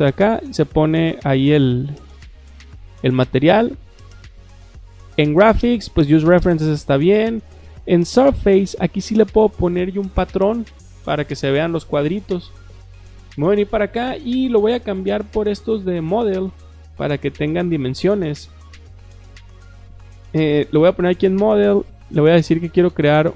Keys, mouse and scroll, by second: 5.0 click, 12.2 click, 15.3 click, 18.6 click, 20.5 click, 20.8 click.